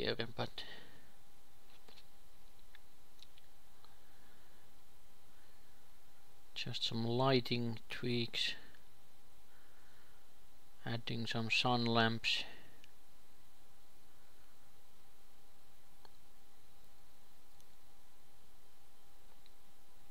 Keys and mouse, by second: 0.7-4.5 drag, 5.7 click, 7.5 ctrl+s, 8.6 shift+a, 10.9 g, 13.2 ., 13.8 r.